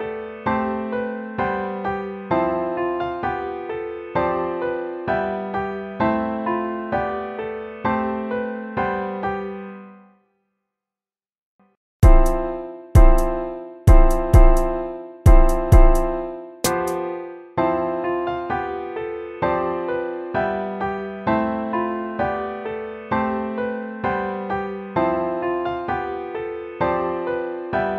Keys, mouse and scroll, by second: 11.2 ctrl+-, 15.6 ctrl+z, 17.1 ctrl++.